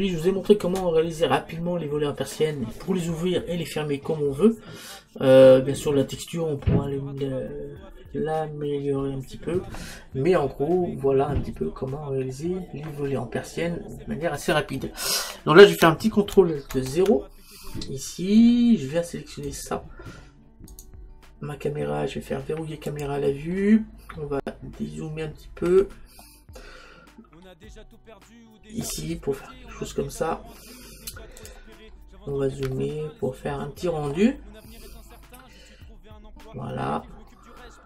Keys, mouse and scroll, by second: 11.2-15.5 middle drag, 12.1-12.8 scroll up 1, 12.8-14.0 scroll up 1, 14.0-15.2 scroll down 1, 15.2-15.5 scroll down 1, 16.9 ctrl+alt+KP_0, 19.6-23.0 right drag, 23.0-24.7 drag, 24.2-28.1 middle drag, 31.4 click, 33.1-34.7 middle drag, 37.3-37.8 middle drag.